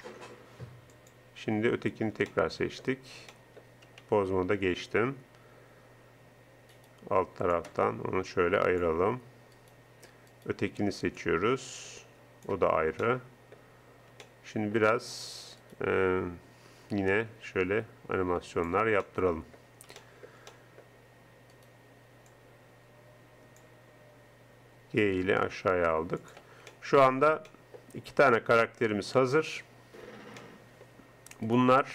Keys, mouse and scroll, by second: 0.9-2.5 drag, 4.3 ctrl+Tab, 9.6-11.3 right drag, 12.1 middle click, 12.8-14.5 middle drag, 15.6-17.1 right drag, 17.6 g, 21.5 right click, 22.4-23.5 middle drag, 25.4 g, 29.6 middle click, 31.5 right click.